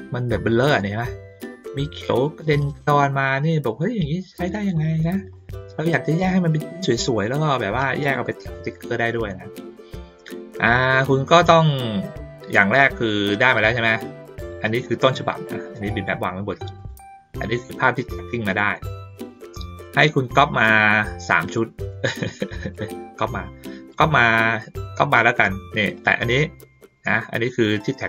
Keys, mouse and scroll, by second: 0.1 ctrl+middle click, 0.6 ctrl+middle click, 1.7 ctrl+middle click, 3.0 ctrl+middle click, 3.4-4.8 ctrl+shift+middle drag, 5.3 middle click, 10.0 middle click, 13.7 ctrl+middle click, 14.8 click, 15.4 click, 16.7 click, 17.4-18.9 drag, 19.3 middle click, 20.4 middle click, 21.5 middle click, 22.7-23.9 drag, 25.9-27.9 drag.